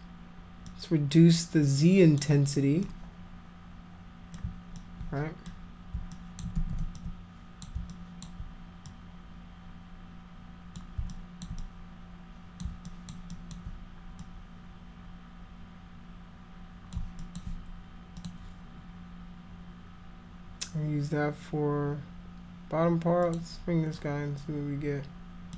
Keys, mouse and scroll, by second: 0.7-2.2 drag, 2.8-4.4 drag, 4.8 alt+click, 6.2 alt+click, 6.6 ctrl+z, 7.0 alt+click, 7.9 alt+click, 8.9-10.8 drag, 11.1 alt+click, 11.6-12.6 drag, 12.9 alt+click, 13.3 alt+click, 14.2-16.9 drag, 17.2 alt+click, 18.2 click, 23.2 click, 24.0-25.5 drag.